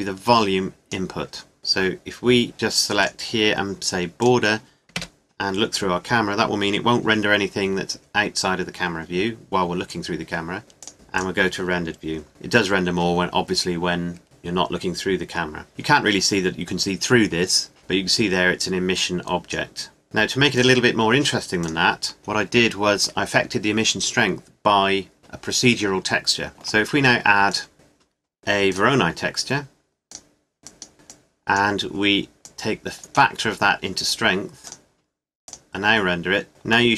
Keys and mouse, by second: 1.3-3.0 middle drag, 4.9 KP_0, 9.8-16.9 drag, 17.8 click, 20.6 click, 22.0-23.3 drag, 27.2 click, 30.6-33.6 drag, 33.6-34.6 middle drag, 34.6 click, 36.4 middle click.